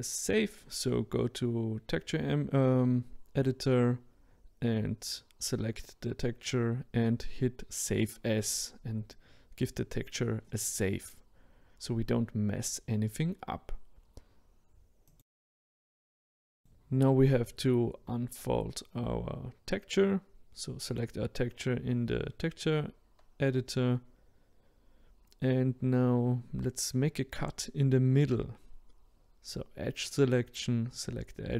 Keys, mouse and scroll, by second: 7.7-9.9 drag, 14.2 click, 15.0 click, 17.9-22.7 drag, 22.7-23.7 scroll down 5, 23.7 middle click, 24.6-25.6 scroll up 4, 25.6-26.5 scroll up 2, 26.6-28.4 middle drag, 28.4 click, 30.1 click, 31.1 alt+click.